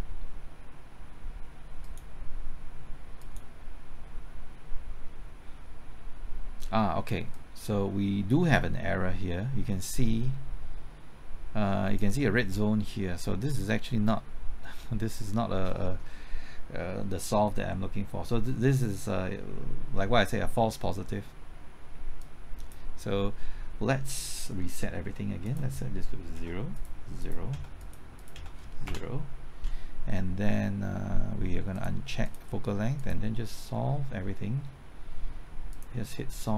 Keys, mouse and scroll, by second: 24.6 middle click, 25.5 click, 26.4 KP_0, 26.8 click, 27.5 KP_0, 27.8 click, 28.4 KP_0, 28.9 Return, 31.8-36.5 drag.